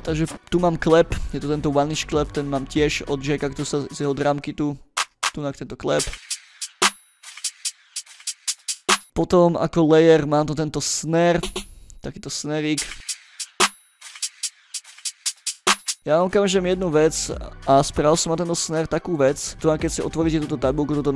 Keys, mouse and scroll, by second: 0.3 middle click, 0.5 scroll down 1, 0.8 ctrl+middle click, 2.0 click, 2.4 ctrl+middle click, 3.0 ctrl+scroll up 1, 3.9 drag, 4.9 click, 5.1 click, 5.9 space, 9.0 space, 9.2 scroll down 2, 9.6 scroll up 2, 11.3 click, 11.5 click, 12.7 space, 15.8 space, 16.4 click, 17.6 click, 19.3 drag, 19.8 click, 20.3 click.